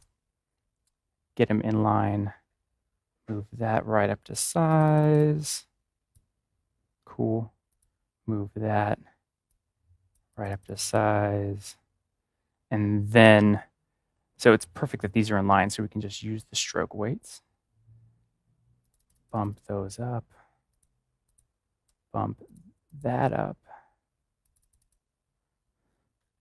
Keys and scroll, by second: 13.1 ctrl+=, 21.8 ctrl+=.